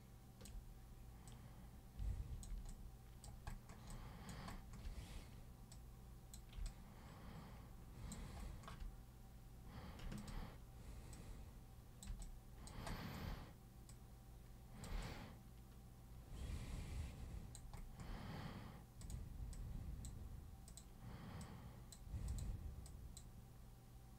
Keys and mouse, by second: 1.3-2.4 super+drag, 2.7 alt+super+click, 3.9 alt+super+click, 5.7 super+click, 6.7-8.1 alt+super+drag, 10.2 ctrl+super+click, 11.2 super+click, 12.2 alt+super+click, 13.9 super+click, 15.0-17.5 alt+super+drag, 19.0 super+click, 19.5 super+click, 20.7 super+click, 21.4 super+click, 22.3 super+click, 22.9 super+click.